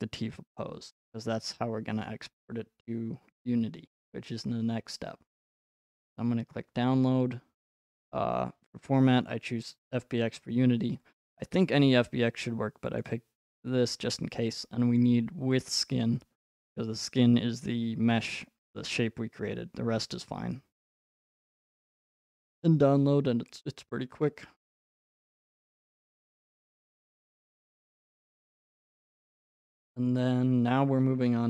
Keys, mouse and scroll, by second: 2.3 right click, 6.1 click, 7.9 click, 11.2 click, 12.1 click, 15.0 click, 15.7 click, 21.5 click, 27.8 click.